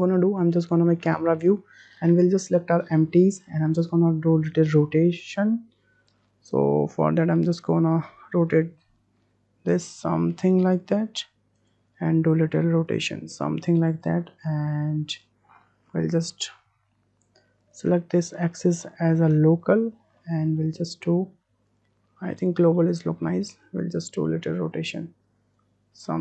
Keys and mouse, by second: 0.0 click, 1.3 shift+click, 2.1 click, 5.4-6.1 drag, 6.8 r, 12.1 r, 16.6 drag, 17.7-19.1 drag, 19.8 click, 20.1-20.6 middle drag, 21.7-22.6 drag, 22.7 middle drag, 23.7-24.9 drag, 25.6 click.